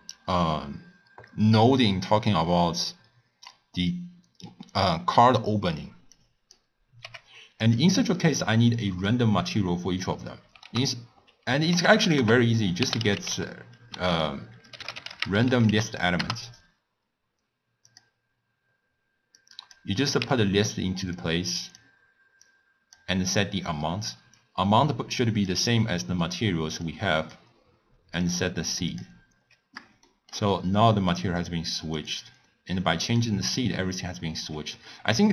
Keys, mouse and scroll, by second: 6.1 drag, 7.0 g, 7.9 click, 10.6 ctrl+a, 19.3-20.1 drag, 20.8 x, 21.1 drag, 22.4 click, 24.3 drag, 26.8 click, 28.2-29.6 drag, 30.0-31.3 shift+middle drag, 31.3 click, 31.9 click, 33.0-33.5 drag.